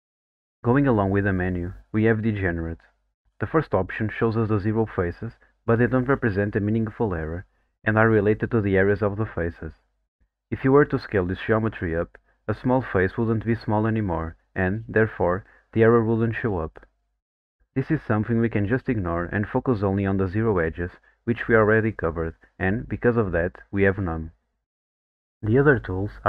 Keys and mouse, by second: 0.2 click, 2.7 click, 5.1 click.